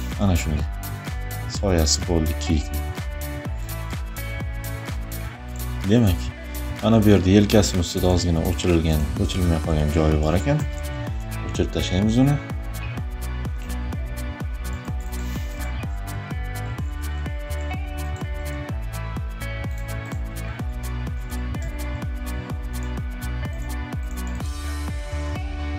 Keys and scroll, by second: 9.2 e, 10.1 [, 15.3 Caps_Lock, 16.7 e, 20.4 e, 21.2 Caps_Lock.